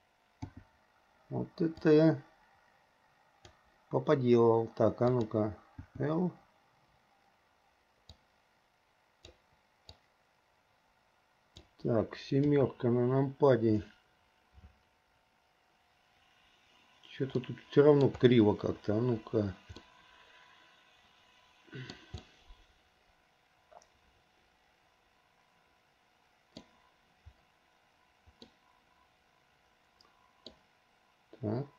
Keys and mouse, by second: 0.6 l, 2.1-5.4 drag, 6.0 l, 8.2-9.5 drag, 10.2-11.8 drag, 12.6 KP_7, 17.6 middle click, 20.0-22.1 middle drag, 22.4-26.8 middle drag, 28.7-30.6 middle drag.